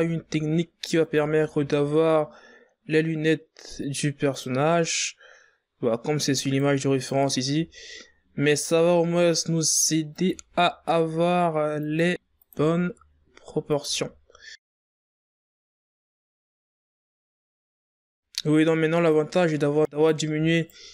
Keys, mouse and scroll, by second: 0.9 e, 4.7 right click, 6.7 right click, 7.3 e, 8.4 e, 10.0 e, 12.1 e, 13.3 e, 14.6-18.8 typing, 20.5 scroll up 5, 20.7 right click.